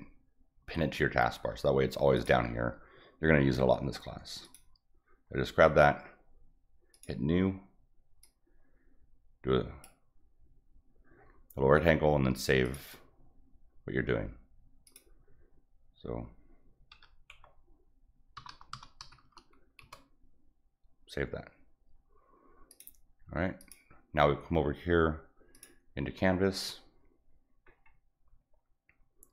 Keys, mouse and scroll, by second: 2.2 click, 4.4 click, 6.9 click, 8.2-9.8 drag, 12.6 click, 14.9 click, 17.0 s, 18.4 b, 18.7 n, 22.7 click, 23.6 click, 25.5 click, 27.7 middle click.